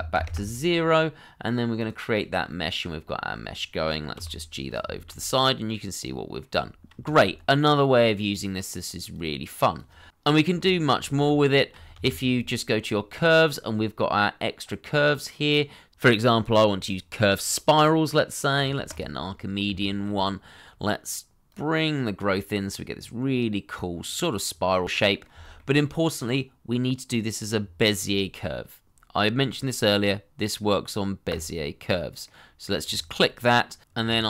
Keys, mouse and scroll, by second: 0.1 0, 0.2 Return, 2.4 middle click, 4.1 g, 4.9 shift+middle click, 5.1 middle click, 6.6 scroll down 1, 7.0 shift+middle click, 7.3-8.0 scroll up 1, 10.2 Delete, 10.4 shift+middle click, 10.8-11.5 scroll up 1, 11.7 shift+middle click, 13.0 shift+a, 19.7 shift+middle click, 24.8 middle click, 25.8 shift+middle click, 32.2 middle click, 32.9 shift+middle click, 33.8 scroll down 1, 34.1 shift+middle click.